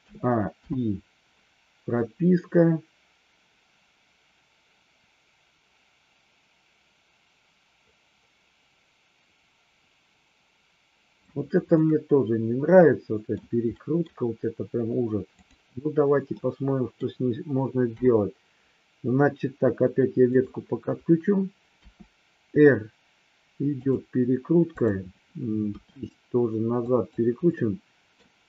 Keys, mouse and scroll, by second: 0.0 a, 0.5 i, 1.9-11.2 drag, 11.6-13.4 middle drag, 13.7 middle drag, 16.2-17.0 middle drag, 17.9 KP_7, 21.7 r, 24.7-25.1 drag, 25.6 r, 26.7 click, 27.5-28.1 middle drag.